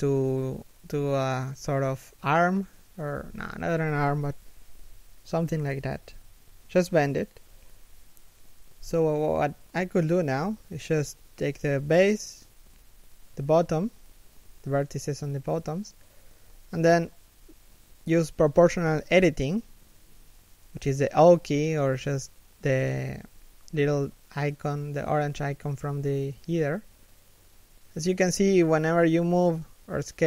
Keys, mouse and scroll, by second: 8.6 g, 9.5 r, 14.4 g, 24.5 g.